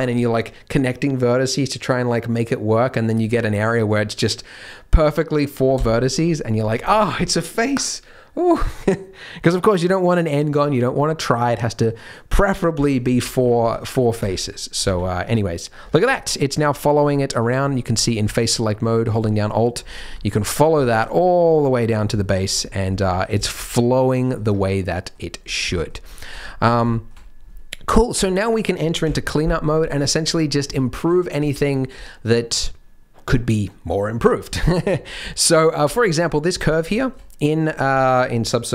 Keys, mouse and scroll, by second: 5.7 f, 6.6 Tab, 12.7 KP_3, 13.4-14.2 scroll down 3, 13.6 Tab, 14.2 Tab, 14.4 middle click, 14.8 z, 15.2 middle click, 15.8 Tab, 16.1 shift+middle click, 16.9 3, 17.9 middle click, 19.0 alt+click, 19.9 scroll down 4, 20.1 shift+middle click, 20.5-20.8 scroll down 2, 20.8 shift+middle click, 22.2 shift+middle click, 22.6-22.9 scroll up 8, 23.1 Tab, 23.4 shift+middle click, 23.6 scroll up 2, 23.8 middle click, 24.4 Tab, 24.7 middle click, 25.4 scroll down 6, 25.7 middle click, 26.0 middle click, 27.0 shift+middle click, 28.1 KP_1, 29.0 KP_3, 29.8 z, 30.2-30.6 scroll up 4, 30.8 shift+middle click, 31.5 1, 34.2 scroll up 1, 34.5 shift+middle click, 34.7-35.4 scroll up 4, 35.2 shift+middle click, 36.6 Tab, 36.9 shift+middle click, 37.6-38.2 scroll down 7.